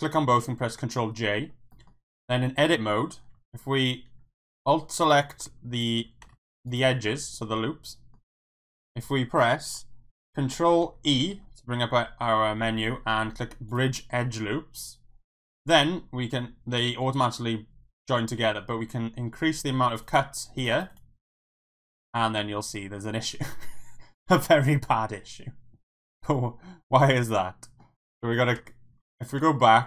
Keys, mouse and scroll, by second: 0.3 ctrl+j, 0.9 middle drag, 1.4 Tab, 1.7 middle click, 2.6 click, 3.8 alt+click, 6.3 ctrl+z, 6.7 alt+shift+click, 7.1-8.1 middle drag, 11.2 ctrl+e, 19.9 click, 20.0 click, 20.6 click, 20.7 click, 20.9 click, 23.1-27.8 middle drag, 29.0 ctrl+z.